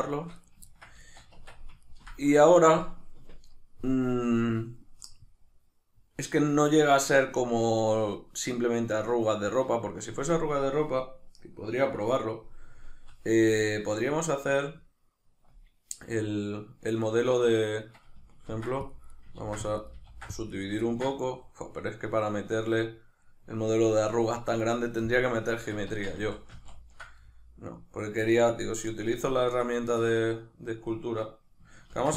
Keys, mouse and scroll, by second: 0.4 right click, 0.6 ctrl+middle click, 1.3 Tab, 1.8-19.2 ctrl+middle drag, 18.5 ctrl+r, 19.2 right click, 19.4 ctrl+r, 19.9 right click, 20.1 ctrl+r, 20.7 right click, 20.9-32.1 ctrl+middle drag, 25.9 ctrl+z, 31.9 ctrl+r.